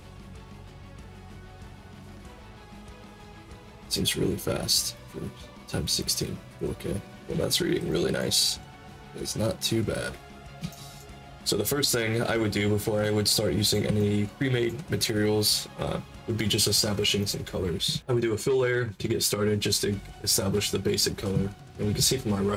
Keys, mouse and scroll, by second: 7.8 alt+click, 8.5 middle click, 8.8 middle click, 9.2-10.5 shift+drag, 10.7 alt+click, 13.0 click, 13.9 alt+click, 17.1 click, 18.1 click.